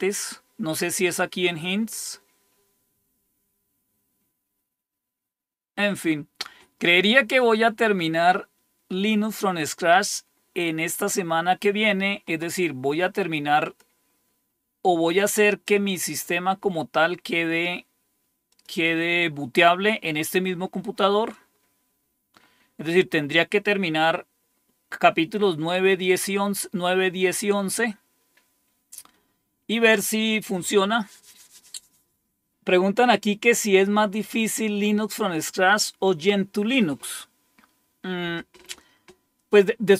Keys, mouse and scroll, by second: 0.9 click, 1.6 click, 7.3 click, 13.5 click, 15.4 click, 18.4 click, 20.4-24.2 scroll down 6, 24.2-24.9 scroll up 2, 26.0-26.9 scroll down 2.